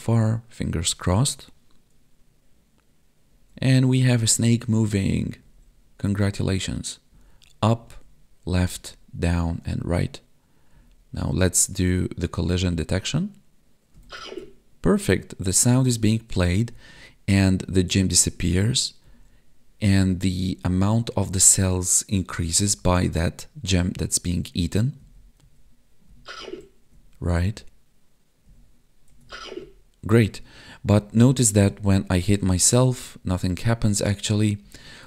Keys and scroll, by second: 3.3 Up, 3.9 Left, 5.4 Down, 6.1 Right, 7.1 Up, 7.8 Left, 8.7 Down, 9.4 Right, 10.7 Up, 11.3 Left, 12.6 Down, 12.7 Right, 13.9 Up, 14.1 Left, 15.6 Down, 16.7 Right, 18.2 Up, 19.0 Left, 20.3 Down, 21.2 Right, 22.6 Up, 23.7 Left, 25.0 Down, 25.4 Right, 26.0 Up, 26.4 Left, 26.9 Down, 27.4 Right, 28.4 Up, 29.0 Right, 29.2 Down, 29.4 Left, 30.3 Down, 30.9 Right, 31.0 Up, 31.3 Left, 31.5 Down, 31.6 Right, 31.9 Left, 32.3 Down, 32.4 Left, 32.5 Up, 33.0 Left, 33.2 Down, 33.9 Left, 34.6 Up, 34.8 Right.